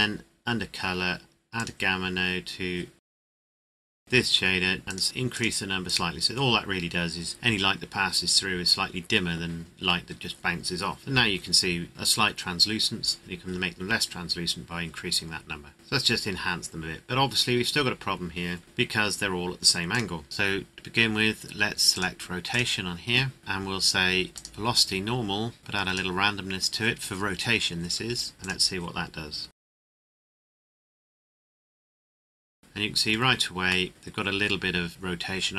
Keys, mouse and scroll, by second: 1.2 click, 1.6 click, 15.7-16.2 scroll up 1, 16.6-18.2 scroll down 1, 18.6 right click, 19.9 click, 24.5 click, 29.5 click, 32.4 middle click.